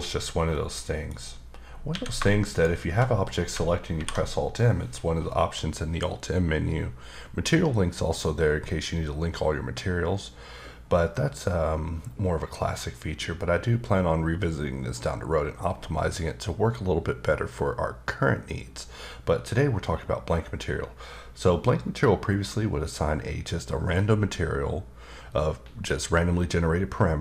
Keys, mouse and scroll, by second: 0.5 middle click, 1.9 a, 2.5 shift+click, 3.9 alt+m.